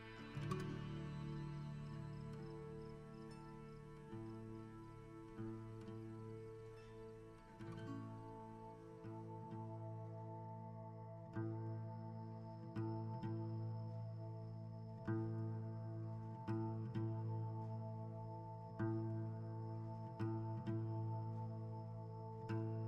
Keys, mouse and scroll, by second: 1.0 r, 2.2 r, 3.0-3.6 scroll down 1, 3.7 shift+middle click, 4.0 a, 4.3 right click, 5.0 click, 5.3 scroll up 1, 6.9 a, 7.1-8.4 right drag, 8.4 h, 9.1 click, 15.3-19.3 typing, 15.8-16.1 scroll down 1, 21.8 click.